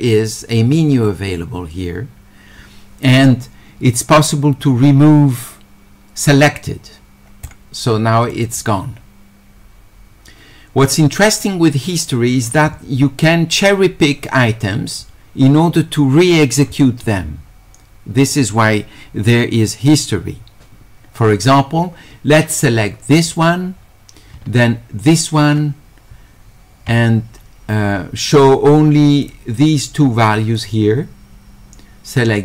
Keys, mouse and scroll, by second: 7.4 click, 8.3 click, 23.3 click, 25.1 ctrl+click, 29.2 ctrl+click, 30.6 ctrl+click.